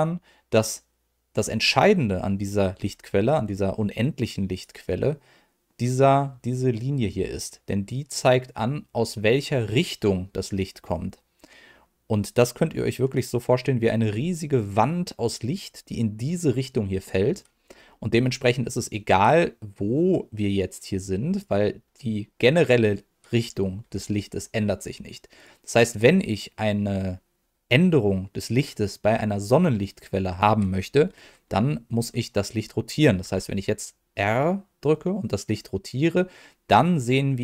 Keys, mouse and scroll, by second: 4.5 click, 21.3 click, 23.8 g, 25.3 click.